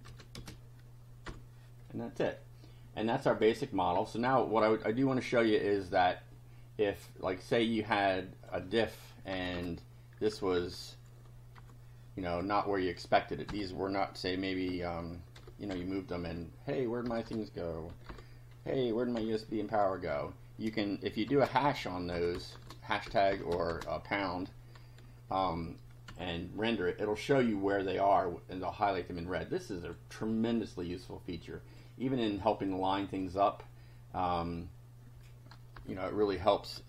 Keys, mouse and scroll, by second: 0.1 ctrl+v, 0.3 ctrl+space, 1.3 F5, 1.9-3.8 drag, 5.9 click, 8.0 click, 9.4 BackSpace, 10.6 0, 11.6 F5, 13.5 BackSpace, 14.7 1, 15.3 0, 15.7 F5, 16.3 Up, 17.1-18.6 typing, 19.2 F5, 20.1 Home, 21.3 shift+3, 21.7 shift+Down, 22.2 shift+Left, 22.5 ctrl+shift+3, 23.1 ctrl+shift+BackSpace, 23.3 shift+Left, 23.7 shift+3, 26.1 F5, 26.8 click, 28.0 click, 29.6 click, 31.5 click, 32.7 click, 35.8 BackSpace.